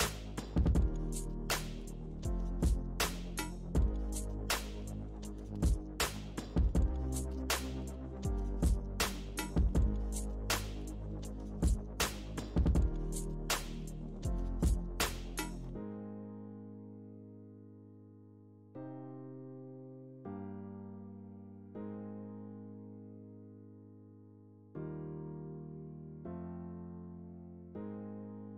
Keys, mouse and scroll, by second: 0.0 middle click, 0.4 click, 1.1 middle click, 1.6 click, 1.9 middle click, 2.8 click, 3.5-4.7 middle drag, 4.7 shift+c, 5.2 f, 6.0 ctrl+click, 6.9 middle click, 7.3 ctrl+click, 7.8 middle click, 8.3 ctrl+click, 9.0 middle click, 9.5 ctrl+click, 10.1-11.9 ctrl+middle drag, 11.9 ctrl+click, 12.8 middle click, 13.2 ctrl+click, 13.5 middle click, 14.4 f, 15.1 ctrl+click, 15.4 middle click, 16.1-17.1 ctrl+drag, 17.1-19.0 middle drag, 19.0 f, 19.7 click, 20.7 middle click, 21.3 ctrl+click, 21.8 middle click, 22.7 ctrl+click, 23.4 middle click, 23.9 click, 24.8 middle click, 25.4 f, 26.0-28.2 ctrl+drag, 28.2 middle click.